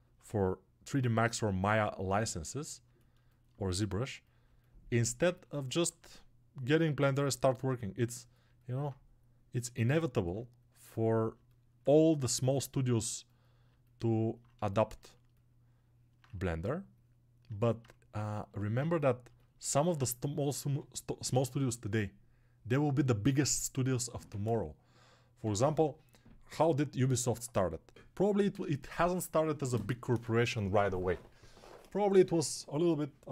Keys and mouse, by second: 1.6-4.8 alt+right drag, 4.8-33.3 alt+shift+drag, 16.2 1.